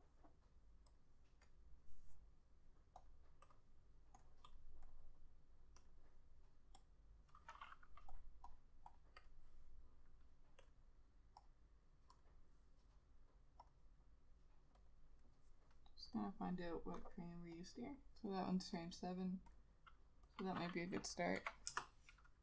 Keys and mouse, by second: 4.6 double click, 8.6 double click, 21.5 7, 21.8 Return.